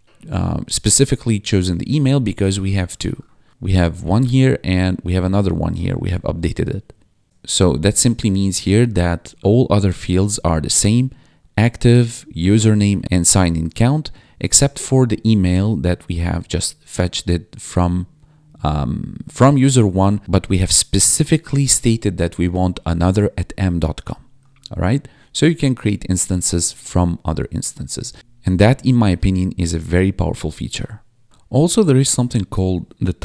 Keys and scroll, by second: 7.2 1, 28.1 Left, 28.4 ctrl+s, 28.7 Down, 29.1 Return, 31.7 ctrl+/, 33.0-33.2 typing.